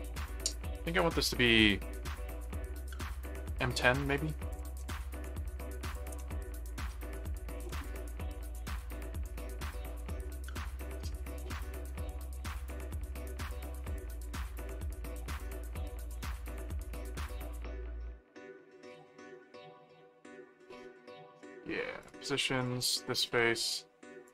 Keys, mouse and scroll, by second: 4.5 click, 4.8-8.2 typing, 11.2 click, 12.5 click, 13.9 click, 22.0 click, 24.2 click.